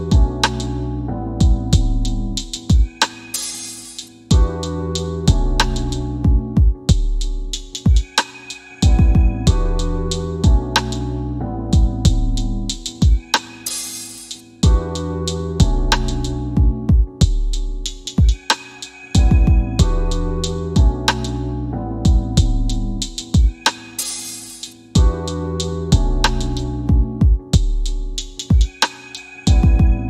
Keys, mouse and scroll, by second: 1.1 m, 2.5 click, 6.7-7.9 typing, 9.6 Return, 10.7 click, 13.7 click.